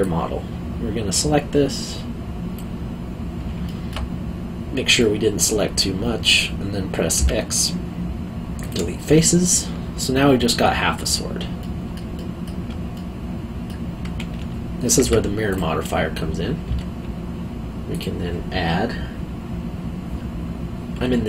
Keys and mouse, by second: 0.0 click, 3.6 alt+middle click, 5.0 middle click, 7.1 x, 8.6 click, 9.2 middle click, 11.6 middle click, 12.1 alt+middle click, 15.0 Tab, 15.5 click, 16.6 Tab, 17.9 click.